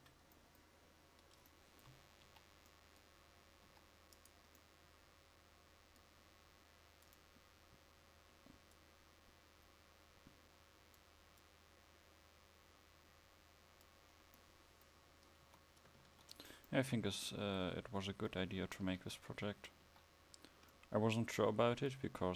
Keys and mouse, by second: 0.0 Escape, 2.3 KP_5, 16.1 ctrl+s, 18.9 KP_1, 19.4 KP_5.